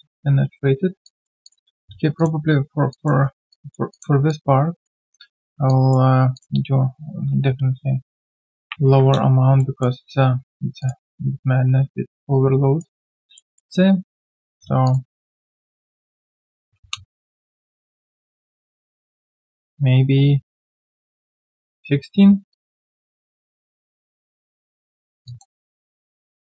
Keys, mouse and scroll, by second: 1.0 alt+click, 1.7-2.3 scroll down 1, 2.9 alt+click, 3.2 alt+right click, 3.5 alt+click, 4.3 alt+click, 5.3 scroll down 1, 5.7 alt+click, 8.6 Delete, 9.6 alt+middle click, 11.4 shift+right click, 13.3 alt+middle click, 16.4-17.2 typing, 22.5 alt+click, 25.2 alt+click, 25.6 alt+middle click, 25.9 right click, 26.3 right click.